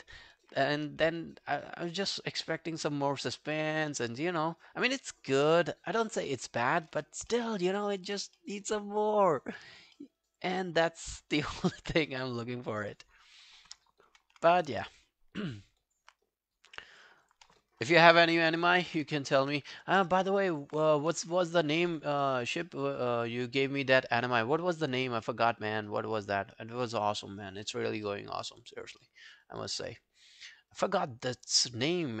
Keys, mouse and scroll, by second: 1.1 shift+right click, 7.5 alt+middle click, 7.8 alt+click, 8.4 alt+middle click, 8.8 alt+click, 10.0 alt+middle click, 10.2 alt+right click, 10.4 alt+click, 12.9 alt+middle click, 13.2 alt+scroll down 2, 13.5 alt+middle click, 14.8 alt+click, 16.2 right click, 17.3 double click, 17.8 double click, 18.2 ctrl+scroll down 2, 18.5 alt+middle click, 18.8 alt+right click, 19.8 ctrl+1, 20.0 alt+middle click, 20.3 alt+right click, 20.5 alt+click, 21.6 ctrl+i, 22.3 alt+click, 22.7 alt+middle click, 22.9 alt+right click, 23.1 alt+click, 23.5 alt+middle click, 23.7 alt+right click, 24.0 alt+click, 24.4 alt+middle click, 24.6 alt+right click, 24.9 alt+click, 25.2 alt+middle click, 25.6 alt+click, 27.2 alt+middle click, 27.4 alt+right click, 27.6 alt+click, 28.1 alt+middle click, 28.4 alt+scroll down 1, 28.6 alt+click, 29.0 alt+middle click, 29.2 alt+right click, 29.5 alt+click, 30.0 right click, 30.9 double click, 31.4 double click, 31.8 scroll down 1, 32.1 alt+middle click.